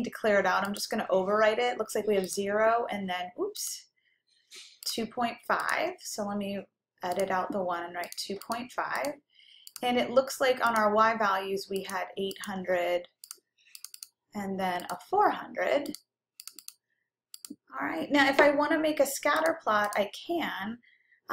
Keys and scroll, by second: 4.9 Return, 7.2 Down, 8.1 2, 8.6 ., 9.2 5, 9.8 Return, 10.8 Right, 11.9 Up, 12.4 Up, 13.3 8, 14.0 0, 14.6 0, 15.1 Return, 16.0 4, 16.6 0, 17.1 0, 17.7 Return.